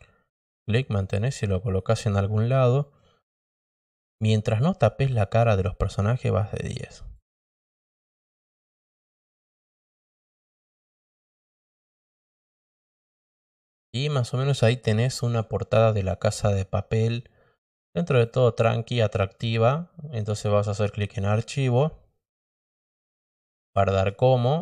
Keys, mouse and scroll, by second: 1.6 click, 2.8-4.2 drag, 4.7-7.1 drag, 9.2 click, 10.2 click, 11.3 click, 12.8 drag, 18.1 click, 21.3 click, 23.9 click.